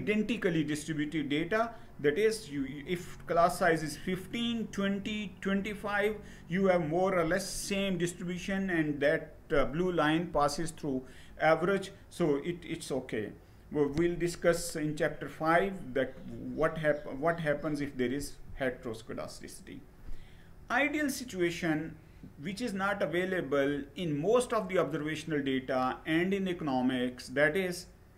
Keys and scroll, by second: 17.8 Down.